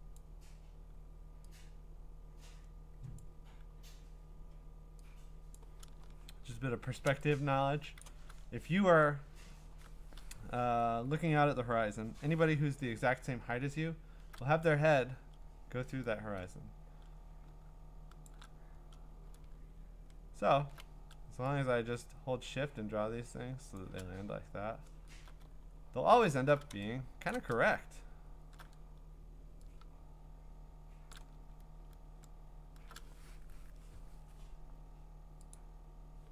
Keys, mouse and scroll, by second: 0.1 click, 0.6 click, 3.2 click, 5.6 click, 6.0-7.1 scroll, 7.8 scroll, 8.0 click, 8.4-9.5 ctrl+scroll, 13.1-13.8 scroll, 17.5 scroll, 18.2 shift+click, 19.4-22.4 scroll, 23.7 shift+click, 24.3-25.0 scroll, 25.5-26.3 scroll, 27.3 click, 27.8-28.4 scroll, 31.1 shift+click, 31.4-32.6 scroll, 35.5 click.